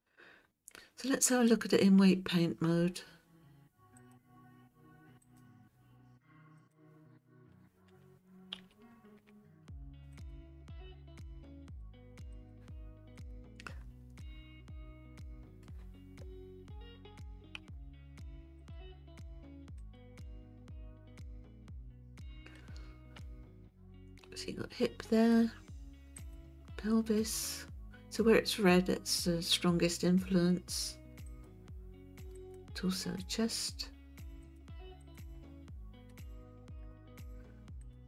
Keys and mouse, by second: 1.4 click, 4.0-5.4 drag, 6.6 click, 8.6 alt+r, 11.8-12.5 drag, 13.1 click, 14.2-15.6 middle drag, 17.6 KP_1, 18.6-20.0 drag, 22.6-25.3 middle drag, 26.2 click, 31.3 click, 32.4 click, 34.4 click, 35.0 click, 36.1 middle click, 37.8 click.